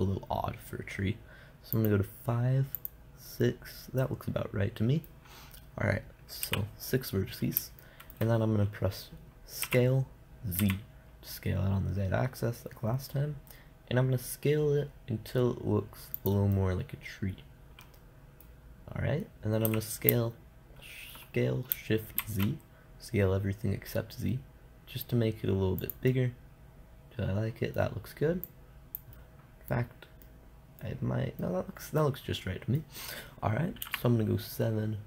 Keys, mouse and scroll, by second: 2.2-5.0 drag, 5.0-6.9 middle drag, 6.9 t, 8.2-10.0 drag, 10.0 s, 16.7 click, 17.1-18.5 middle drag, 20.1 s, 26.4 click, 26.5-28.9 middle drag, 28.9 click, 29.6-31.0 middle drag, 32.2-34.3 middle drag, 34.3 KP_7.